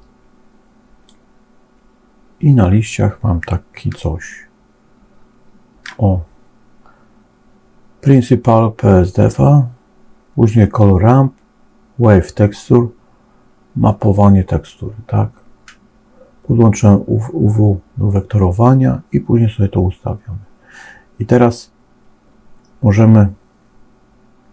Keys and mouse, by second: 0.0-1.0 drag, 4.0-5.0 shift+middle drag, 5.0 shift+click, 5.1 shift+middle click, 5.3 shift+click, 5.6 shift+middle click.